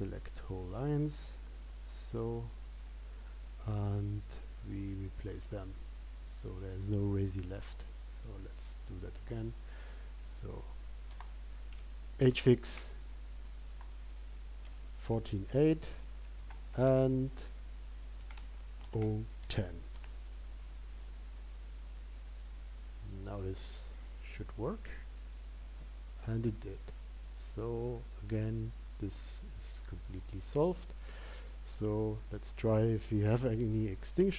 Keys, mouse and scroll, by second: 9.0 click.